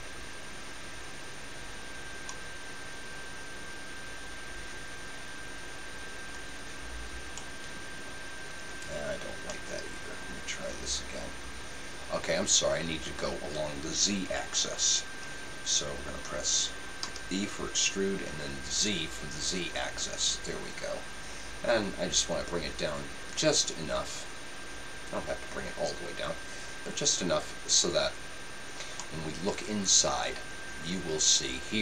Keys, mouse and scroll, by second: 8.9-10.4 right drag, 9.5-11.3 middle drag, 17.1 e, 28.0-29.8 drag, 29.0-30.8 middle drag.